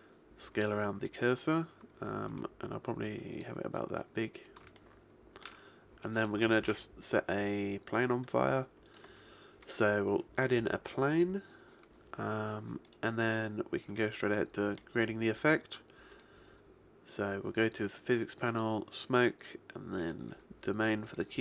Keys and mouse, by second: 2.4 s, 3.5 click, 6.7 shift+a, 12.9-14.7 right drag, 14.7-16.7 middle drag, 16.7 click, 18.6-21.2 drag, 21.2-21.4 middle drag.